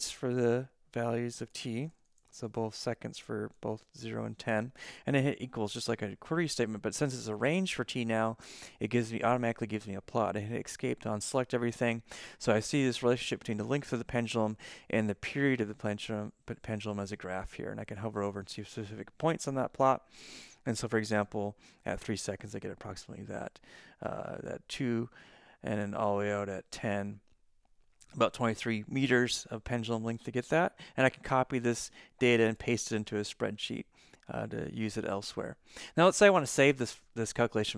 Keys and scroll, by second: 0.0-4.1 typing, 4.1 Right, 5.3 =, 10.6 ctrl+z.